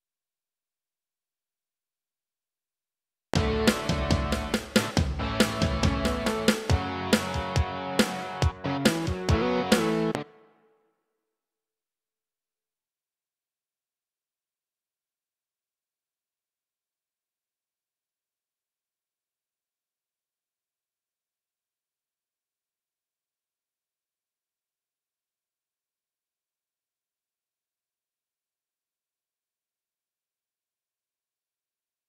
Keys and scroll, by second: 3.2 space, 10.2 space, 11.6 ctrl+s.